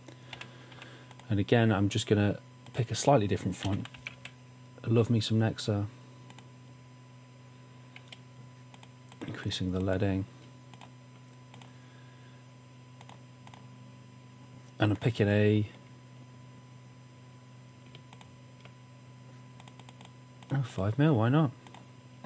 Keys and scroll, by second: 0.5 typing, 3.7-4.6 typing.